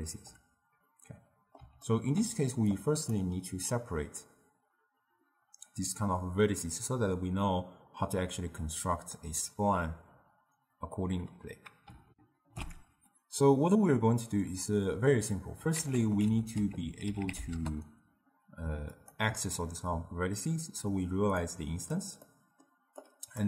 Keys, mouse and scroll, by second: 0.2 d, 0.3 d, 0.9-1.7 middle drag, 1.9 scroll up 2, 1.9-2.8 ctrl+middle drag, 2.8 click, 12.2 ctrl+alt+shift+q, 15.8 ctrl+a, 21.5-22.3 drag, 22.3-23.0 middle drag, 23.0 click.